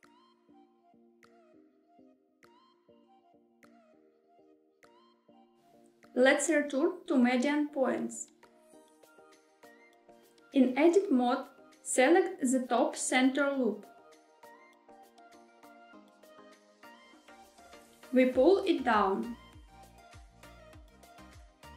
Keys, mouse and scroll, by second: 2.1 right click, 7.3-9.2 drag, 11.4 Tab, 14.0 2, 16.7 click, 16.9 click, 17.6 e, 18.3 z.